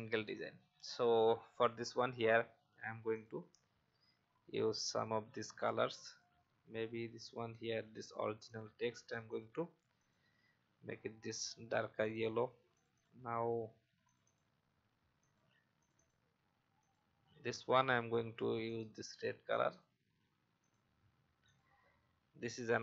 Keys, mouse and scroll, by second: 17.3 click.